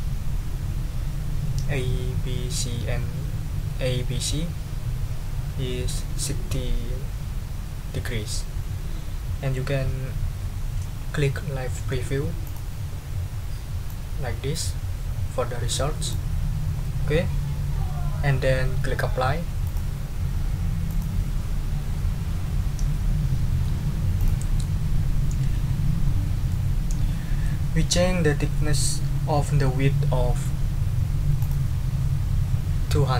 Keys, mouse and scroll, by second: 12.4 click, 13.9-16.3 drag, 19.6 click, 20.9 click, 24.2 click, 26.5-27.6 middle drag, 31.4 click.